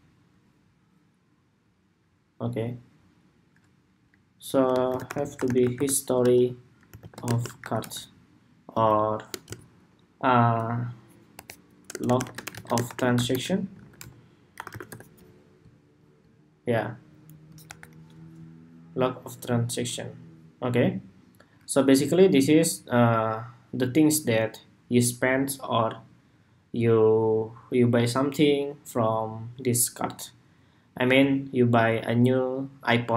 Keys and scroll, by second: 8.5 super+a, 17.3 super+=.